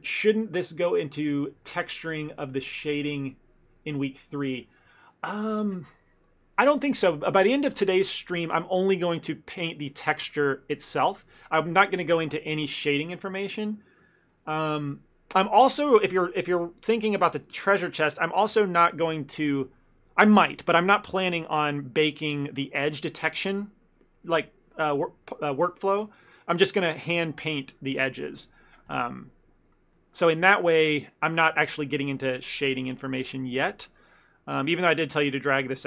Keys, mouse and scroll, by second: 14.1 middle click, 29.8 middle click, 30.2 ctrl+middle click, 30.6 middle click, 30.9 shift+middle click, 31.2 ctrl+middle click.